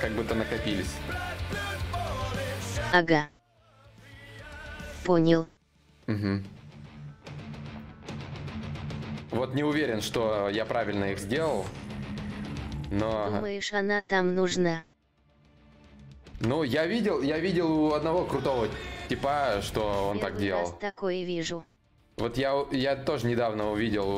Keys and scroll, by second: 15.0 4, 21.6 shift+d.